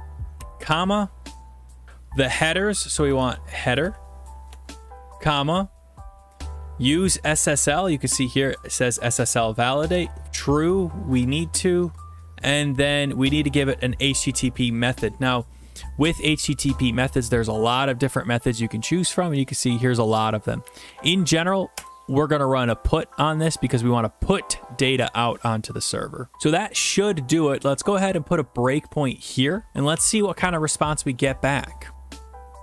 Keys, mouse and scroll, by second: 0.0 Right, 0.4 typing, 2.7-5.4 typing, 4.5 Tab, 9.9-11.8 typing, 18.6-19.3 Down, 19.7 Down, 20.2 Down, 21.0 Up, 21.4 Down, 21.7 Return, 26.3 scroll, 29.0 click, 31.9 click.